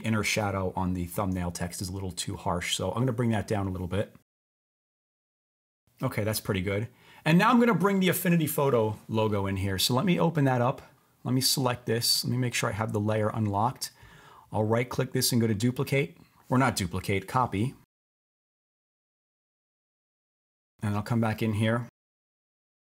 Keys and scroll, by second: 22.5 super+v.